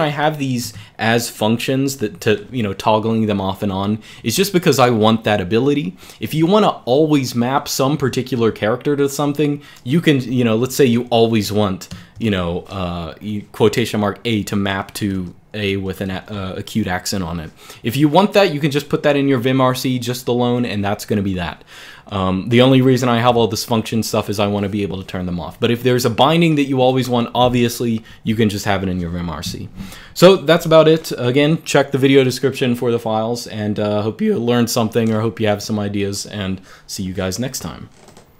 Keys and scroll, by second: 0.4 Escape, 1.7 g, 1.9 g, 9.7-10.4 j, 10.7 k, 11.6 shift+v, 15.0 Escape, 15.5 Escape.